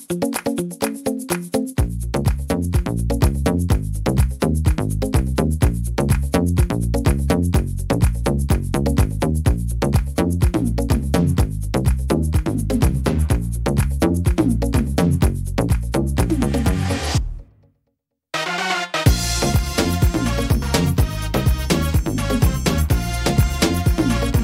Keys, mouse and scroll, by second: 0.7 click, 1.4 click, 2.1 click, 2.5 click, 3.8 click, 5.0 middle click, 6.5-7.0 scroll up 2, 7.3-7.8 scroll down 2, 7.8 shift+middle click, 8.3 middle click, 8.9 scroll up 1, 9.3 shift+middle click, 9.9 scroll up 1, 10.4 middle click, 11.3-12.0 scroll down 2, 11.7 middle click, 13.1 ctrl+z, 13.4 ctrl+z, 13.6 ctrl+z, 13.9 ctrl+z, 14.3 ctrl+z, 15.3 ctrl+z, 16.3 ctrl+z, 17.0 right click, 18.2 click, 19.4 middle click, 19.7 scroll down 2, 21.6 click, 22.1 middle click, 22.5-22.8 scroll up 3, 22.9 middle click, 23.4 right click, 24.2 shift+right click.